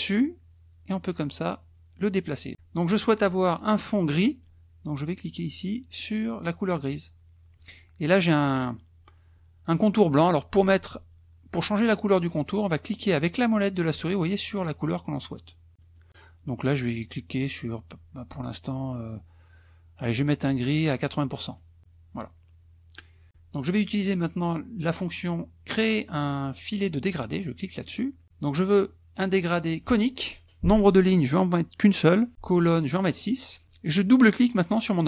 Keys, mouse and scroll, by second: 6.9 click, 13.2 click, 14.1 click, 15.0 click, 15.9 click, 21.4 click, 27.3 click.